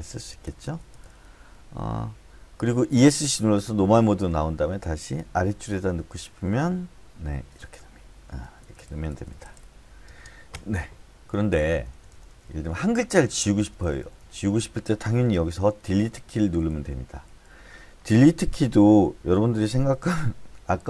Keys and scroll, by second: 0.0-0.6 typing, 4.8-5.6 typing, 8.2-10.0 typing, 11.3 Left, 11.5 Left, 11.7 Left, 11.9 Left, 12.1 Left, 12.3 Left, 12.5 Left, 13.3 Left, 13.6 Left, 13.8 Left, 14.0 Left, 14.2 Left, 14.6 Left, 16.0 Delete, 16.7 Delete, 17.2 Delete.